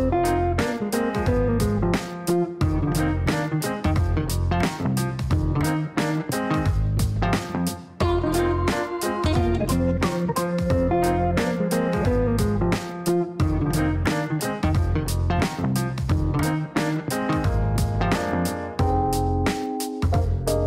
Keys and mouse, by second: 0.5-2.0 typing, 3.5 shift+r, 6.2 click, 6.4 click, 6.9 click, 13.2 KP_5, 13.3 KP_0, 14.8 click, 16.5 click, 18.6 KP_5, 18.7 KP_0, 19.3 KP_Enter.